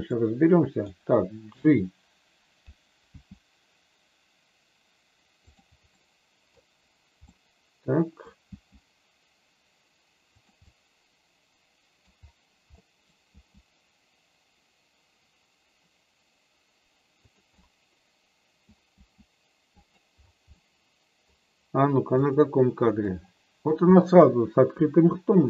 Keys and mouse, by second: 0.1 middle click, 3.0 g, 5.5 click, 6.0 middle click, 7.2-8.2 middle drag, 8.5 g, 10.2 click, 10.6-12.0 middle drag, 12.8 middle click, 13.2 g, 17.1 click, 17.6-18.6 middle drag, 18.8 g, 19.8 click, 20.4 middle click, 22.2 click, 23.0 middle click.